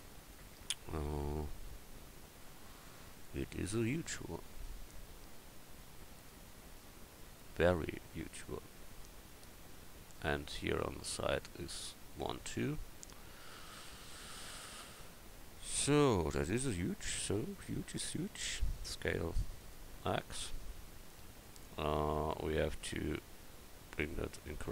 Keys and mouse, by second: 17.9 s.